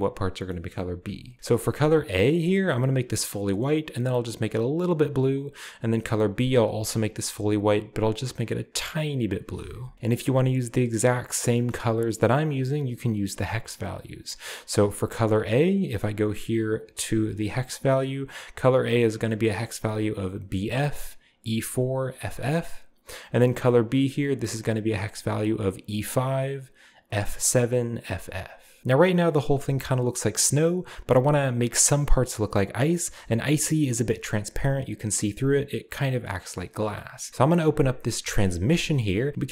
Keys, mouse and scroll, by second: 0.7-1.7 scroll up 2, 0.7 middle click, 2.0 click, 2.6 scroll down 1, 2.7-4.0 scroll up 2, 4.0 click, 6.1 click, 6.6-7.6 scroll up 2, 6.6-7.0 drag, 8.1 click, 8.4 click, 8.9-9.9 drag, 11.7-12.3 middle drag, 14.9 click, 16.8 click, 23.9 click, 28.5 scroll down 2, 29.8 scroll up 2, 37.3-37.9 scroll up 1, 38.7 click.